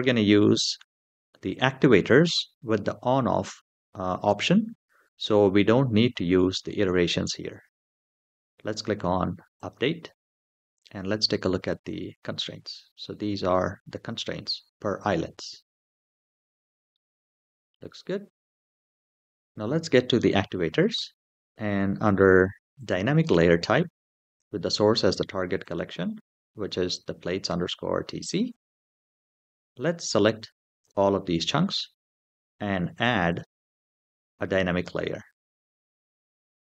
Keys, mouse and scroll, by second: 9.3 click, 10.5 middle click, 11.6 click, 12.4-12.9 middle drag, 13.2-14.2 scroll up 3, 16.1 scroll down 2, 16.7-17.0 middle drag, 18.8 click, 22.6 click, 24.0 click, 25.4 click, 29.8 click, 33.1 click, 34.6-36.1 middle drag, 36.5 scroll down 1.